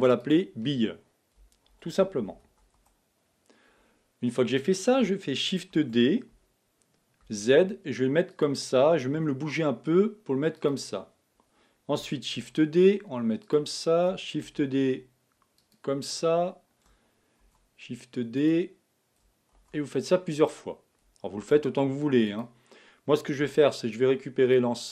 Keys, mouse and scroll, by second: 0.0 click, 0.2-2.3 drag, 2.3 l, 5.8 shift+d, 9.7 g, 12.4 shift+d, 14.5 shift+d, 17.4 shift+d, 21.4 shift+d, 23.4 b.